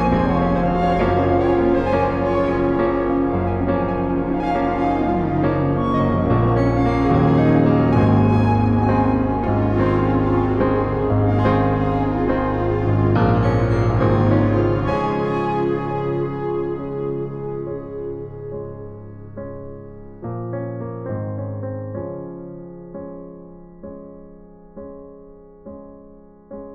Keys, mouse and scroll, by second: 1.7-4.3 right drag, 4.3 middle click, 6.0-7.4 right drag, 10.5 ctrl+e, 13.4 click, 17.5 Delete, 22.8 shift+a, 26.4 click.